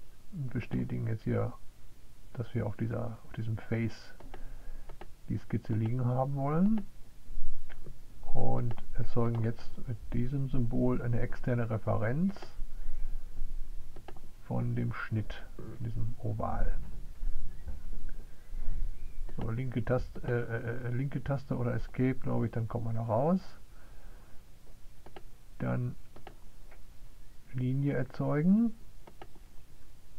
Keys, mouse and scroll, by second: 0.0 click, 6.0 click, 9.1 click, 13.7 click, 19.8 right click, 26.2-29.2 drag.